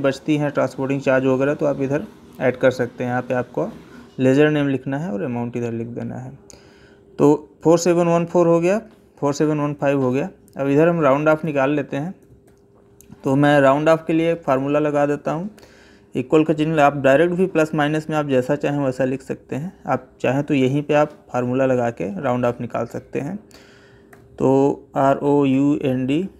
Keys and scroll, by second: 8.5 Down, 9.2 Right, 12.0 Up, 12.2 Left.